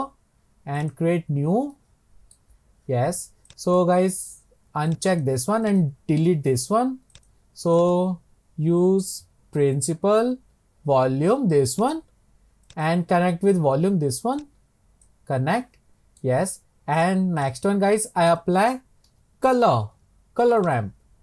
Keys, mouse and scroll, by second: 1.0 click, 1.8-2.5 middle drag, 2.5-3.5 scroll up 4, 5.7-6.7 drag, 6.7 Delete, 11.9 click, 15.1 click.